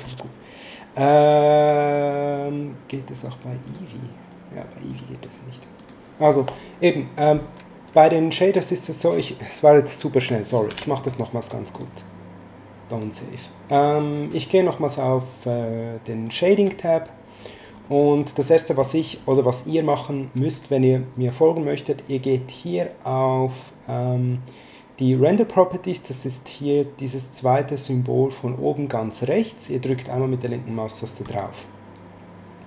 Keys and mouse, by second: 3.1 click, 4.9 click, 10.6 ctrl+n, 11.7 click, 12.9 click, 16.2 click, 18.4 middle click, 31.2 click.